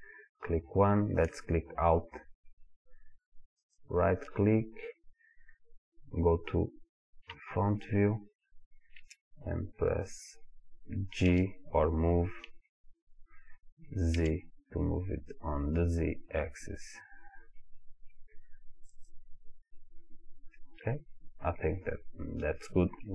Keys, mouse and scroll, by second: 3.6 alt+click, 7.3 KP_1, 11.3 g, 19.1 click, 20.5-23.1 middle drag.